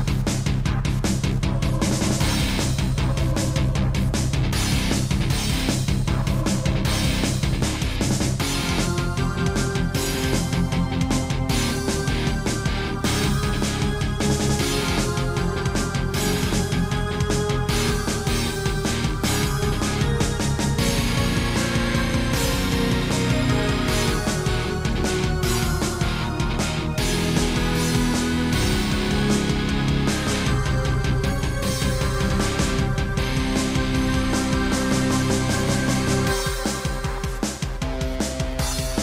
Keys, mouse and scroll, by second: 0.9 click, 2.7 click, 5.3 click, 7.1 scroll down 3, 10.9 scroll up 3, 11.5-11.9 scroll down 3, 11.9 middle click, 12.7 shift+middle click, 14.3 shift+middle click, 15.3 click, 17.3 i, 18.5 Escape, 20.0 click, 21.4 click, 23.0 shift+middle click, 23.4 middle click, 23.8 scroll up 2, 24.2 shift+middle click, 25.5 scroll down 1, 27.3 scroll down 1, 28.1 typing, 29.0 shift+middle click, 30.3 scroll up 1, 30.6 shift+middle click, 30.8 middle click, 31.9 middle click, 33.0 middle click, 34.6 shift+middle click, 36.5 click, 36.6 click, 37.6 i.